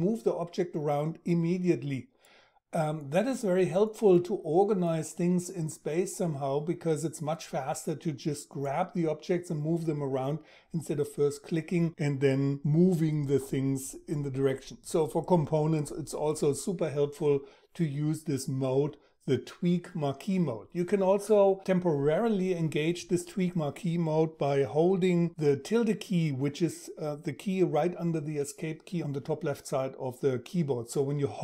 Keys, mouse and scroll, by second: 25.0 `.